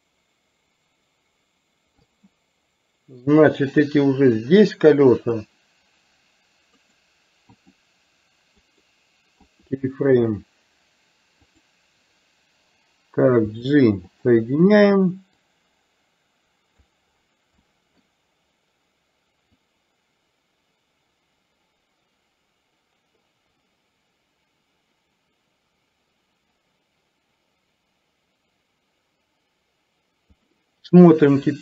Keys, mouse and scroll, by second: 3.8-5.4 drag, 7.0 right click, 8.8-9.8 right drag, 11.4 click, 13.7 g, 15.5-16.9 drag, 17.7 middle click, 19.8-30.5 drag.